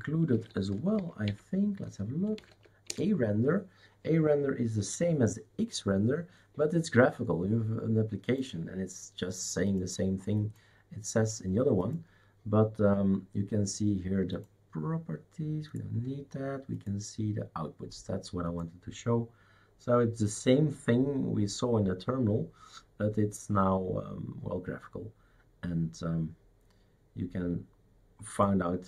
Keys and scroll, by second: 0.3 shift+super+d, 0.5-3.0 typing.